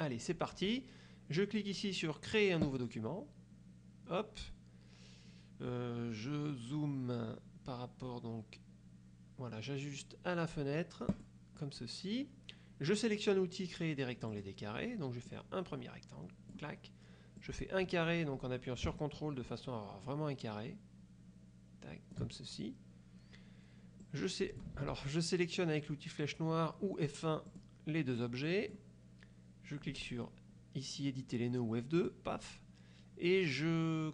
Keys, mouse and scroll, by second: 2.8 click, 11.2 click, 14.4 click, 15.4-16.8 drag, 17.5-22.4 drag, 24.2 click, 24.9 ctrl+z, 27.6 click, 28.3 click, 32.1 click.